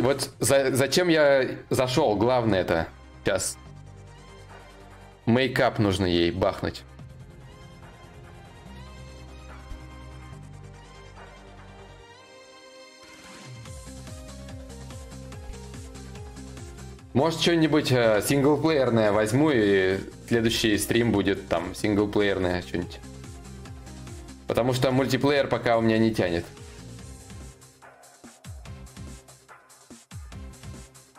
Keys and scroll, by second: 9.3-12.4 typing.